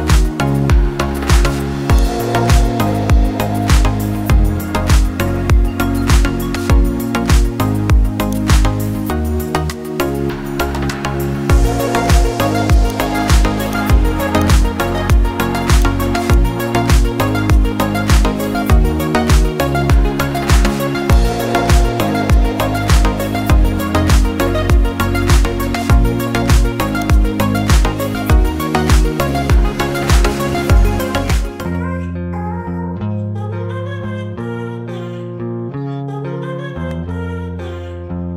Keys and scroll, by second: 5.1 space, 6.0 ctrl+alt+space, 6.8 ctrl+alt+space, 20.8 ctrl+alt+space, 21.9 ctrl+alt+space.